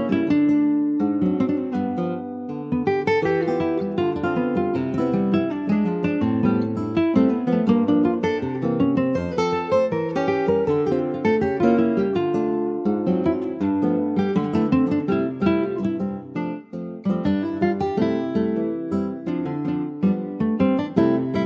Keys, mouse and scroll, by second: 0.1 shift+middle click, 0.7 shift+click, 1.2 middle click, 1.8 ctrl+b, 4.7 middle click, 5.1 click, 5.5 middle click, 5.9 Tab, 6.2 click, 6.8 ctrl+s, 6.9 middle click, 7.3 ctrl+s, 7.9 click, 8.1 /, 9.0 click, 9.5 click, 9.6 /, 10.4 click, 10.6 scroll down 3, 10.9 middle click, 11.6 ctrl+s, 11.6 click, 12.0 middle click, 13.0 alt+z, 13.3 scroll up 2, 13.7 shift+middle click, 14.1 click, 14.6 click, 15.2 ctrl+a, 17.0-19.3 right drag, 19.4 click, 19.9 ctrl+a, 21.1 right click.